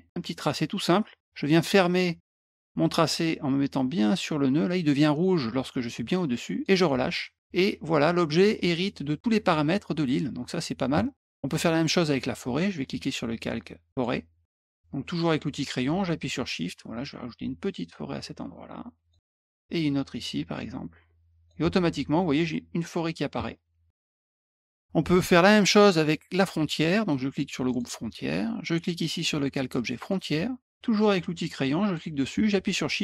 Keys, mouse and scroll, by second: 13.9 click, 16.1-19.1 shift+drag, 19.7-21.4 shift+drag, 24.3 click, 27.6 click, 29.9 click, 31.8 click.